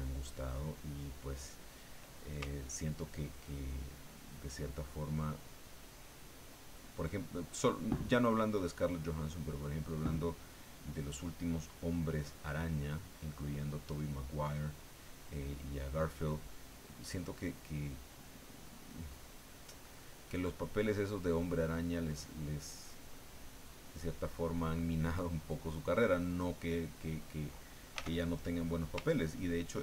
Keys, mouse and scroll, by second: 0.0 click, 3.6-5.4 ctrl+drag, 5.6 ctrl+click, 6.5 ctrl+click, 7.8 ctrl+click, 8.7 ctrl+click, 9.2 ctrl+click, 10.9 ctrl+click, 11.5-13.7 ctrl+drag, 15.6-18.1 ctrl+drag, 18.2-20.6 ctrl+drag, 20.7 ctrl+click, 22.4 ctrl+click, 23.3-24.4 ctrl+drag, 24.5-25.7 ctrl+drag, 27.9 f, 28.6 click, 29.1-29.8 ctrl+drag.